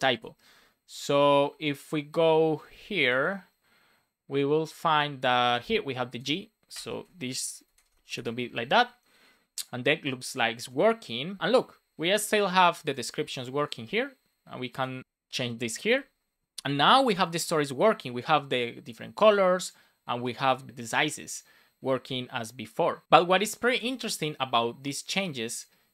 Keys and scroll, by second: 6.7 BackSpace, 6.8 super+s, 7.7 alt+shift+f, 8.1 super+s, 23.6 super+b.